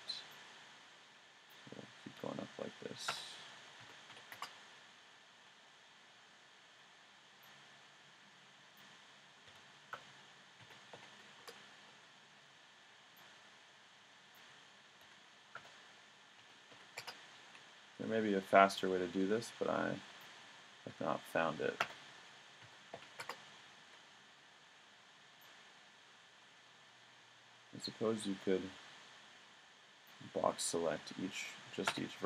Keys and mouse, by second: 0.0 b, 2.1 s, 5.3 a, 6.7 b, 9.4 s, 11.7 a, 12.4 b, 15.0 s, 17.3 a, 18.0 b, 20.9 s, 23.5 a, 24.3 b, 31.0 s.